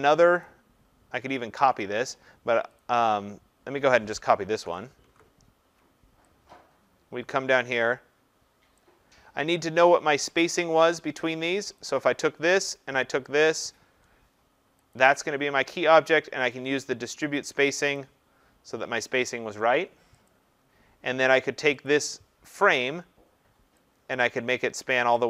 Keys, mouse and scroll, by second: 0.4 click, 2.8 click, 4.6 ctrl+c, 5.0 ctrl+v, 8.8 click, 11.8 click, 13.4 shift+click, 14.9 click, 17.9 click, 20.3 click, 21.9 click, 25.1 click.